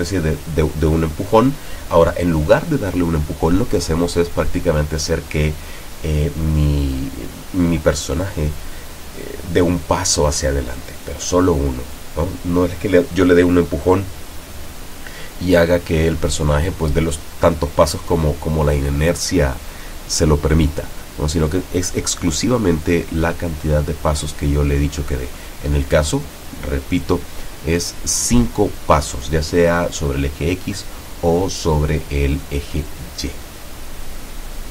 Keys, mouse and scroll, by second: 0.2 w, 4.3 s, 6.3 Escape, 10.0 p, 12.3 w, 12.7 Up, 13.3 s, 13.9 Down, 14.7 Right, 15.3 s, 15.8 Up, 17.2 s, 18.0 w, 18.4 Up, 18.8 Left, 20.2 s, 22.8 Up, 23.3 s, 23.6 Up, 24.5 w, 25.2 s, 25.4 Up, 27.0 Down, 28.2 s, 28.2 Down, 28.9 Up.